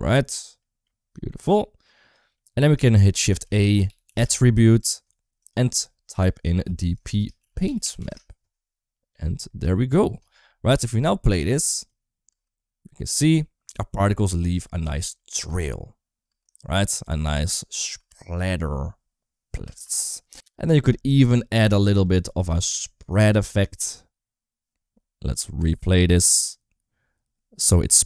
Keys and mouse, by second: 1.7 click, 2.2 middle click, 3.1 shift+a, 3.9 t, 5.2-7.9 drag, 8.9 click, 12.2 space, 14.1 space, 15.0 middle click, 16.1 space, 18.1 space, 21.8 click, 22.1 click, 23.3 click, 25.1 click, 25.5 space.